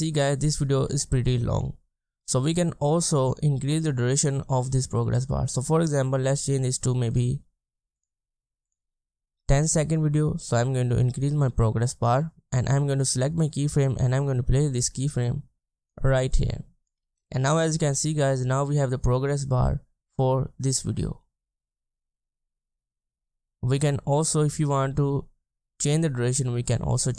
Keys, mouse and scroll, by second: 1.0 space, 1.1-1.6 ctrl+scroll down 1, 2.1 ctrl+scroll down 1, 8.8 BackSpace, 19.4 space, 23.5 space.